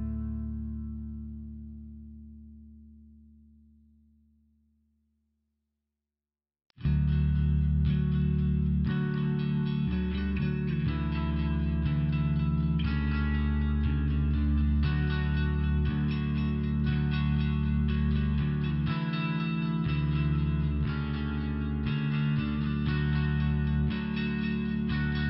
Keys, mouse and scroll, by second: 1.9 click, 5.2 click, 5.4 click, 6.4 click, 8.1 click, 10.3 click, 12.0 click, 12.3 click, 12.7 click, 15.2 click, 16.0 click, 20.3 click, 21.3 click, 24.5 click.